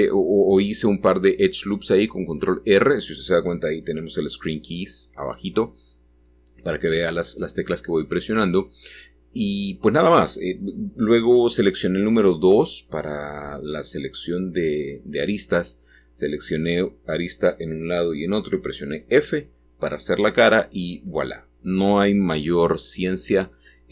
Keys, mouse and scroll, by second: 4.4 click, 5.0-8.5 scroll up 1, 16.8 s, 20.0 click, 20.8 shift+middle click.